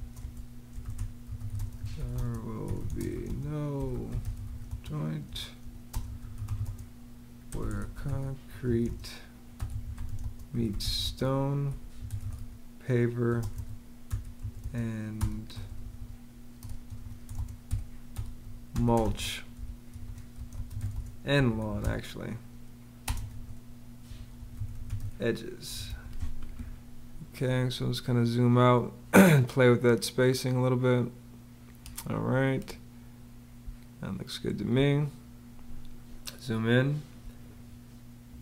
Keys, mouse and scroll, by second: 0.0-15.4 typing, 16.4-26.2 typing, 33.4 space, 37.0 space.